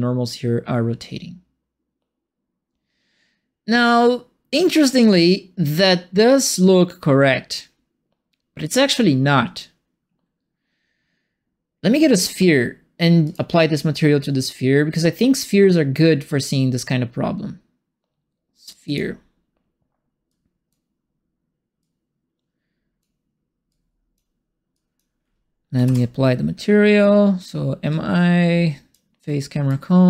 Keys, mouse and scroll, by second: 8.6 click, 13.2 click, 18.8 click, 20.2 click, 21.8-23.0 drag, 23.6 click, 24.7 click, 25.8 ctrl+space, 27.9-28.9 drag, 29.6-30.0 right drag, 29.8-30.0 typing.